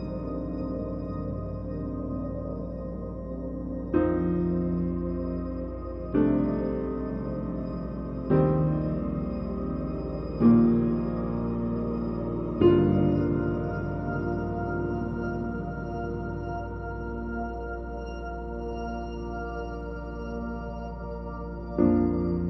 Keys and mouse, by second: 0.7 click, 1.1 click, 1.5 ctrl+z, 2.2 h, 2.3 click, 2.6 click, 2.9 click, 3.8 click, 4.3 click, 4.7 click, 5.1 middle click, 5.2 shift+middle click, 5.5 shift+click, 5.5-18.4 typing, 5.9 click, 7.1 shift+click, 7.2 shift+click, 7.5 shift+click, 8.9 drag, 9.3 click, 9.5 middle drag, 10.0 drag, 10.4 click, 10.7 alt+h, 11.0 click, 11.1 shift+click, 11.7 shift+drag, 13.3 Tab, 15.1 shift+click, 15.2 click, 15.9 Tab, 16.0 click, 16.6 click, 16.7 Tab, 17.8 Tab, 17.9 Tab, 19.1 click, 19.4 click, 19.8 g, 20.4 g, 20.6 click, 20.6 g, 20.8 e, 21.0 click, 21.2 shift+click, 21.4 ctrl+r, 21.9-22.4 typing.